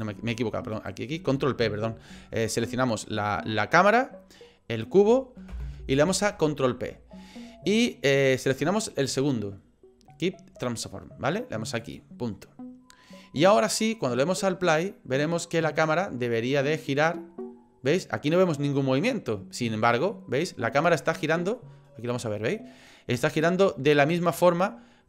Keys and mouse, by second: 0.7 shift+click, 5.5 ctrl+p, 14.7 click, 21.6 middle click.